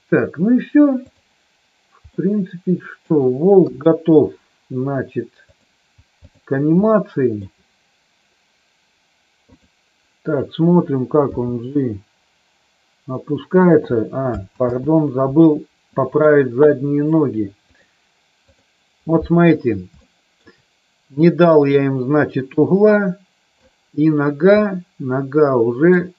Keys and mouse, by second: 1.0 click, 2.0-3.0 middle drag, 3.6 KP_3, 5.4 click, 6.2 click, 6.9 shift+middle click, 11.2 g, 13.5 click, 14.6 ctrl+z, 17.6-18.6 drag, 19.9 shift+middle click, 21.1 click, 22.6-23.6 drag, 24.6-26.0 middle drag.